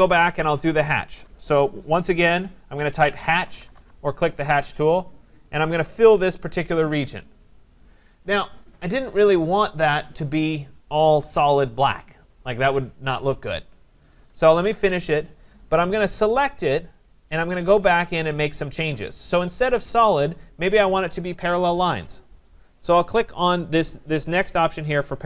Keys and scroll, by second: 3.7 Return, 14.5 Return.